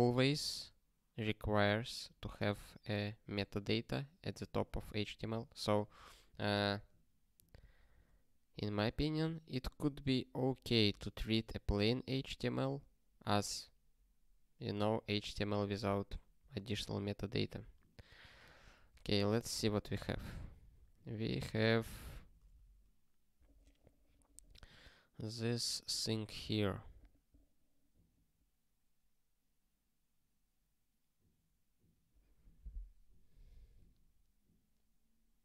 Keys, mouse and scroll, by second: 16.5 super+o, 17.2 ctrl+e, 18.2 ctrl+n, 18.4 ctrl+n, 18.9 ctrl+e, 22.5 ctrl+p.